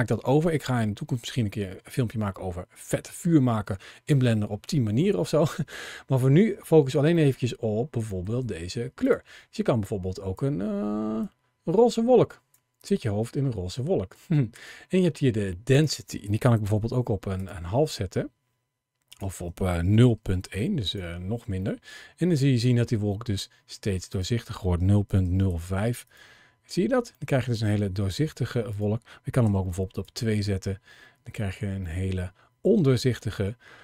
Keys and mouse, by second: 7.0 middle click, 8.0 middle click, 8.8 click, 15.5-17.2 drag, 18.9-20.7 drag, 21.4-22.1 middle drag, 23.9-26.0 drag, 27.0-27.5 middle drag, 28.5-29.7 drag, 31.7-32.7 middle drag.